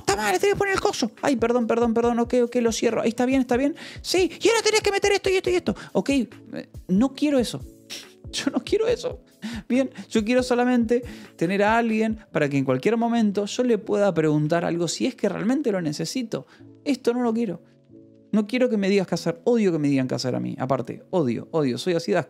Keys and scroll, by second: 0.1 BackSpace, 0.3 space, 0.7 BackSpace, 2.4 shift+., 3.9 Return, 4.5 Escape, 4.7 k, 5.4 o, 9.4 Escape, 13.1 a, 14.1 space.